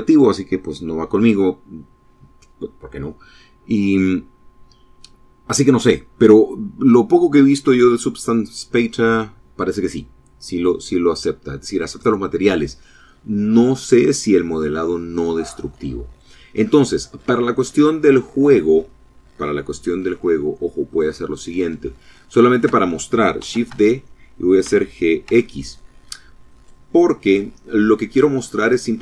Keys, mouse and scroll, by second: 10.4-11.6 drag, 14.6-16.3 drag, 16.5 middle click, 19.9 click, 20.8 shift+click, 22.4 shift+d, 22.7 Escape, 23.6 g, 24.2 x, 25.4 click, 26.3 click, 27.3 scroll up 2, 27.9 shift+click, 28.5 shift+click.